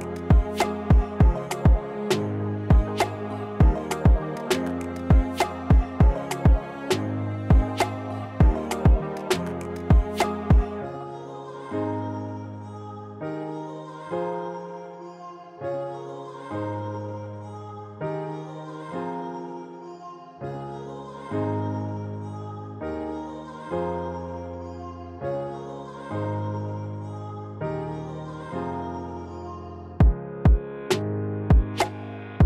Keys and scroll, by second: 2.5 2, 13.1 alt+q, 18.8 ctrl+z, 19.3 alt+q.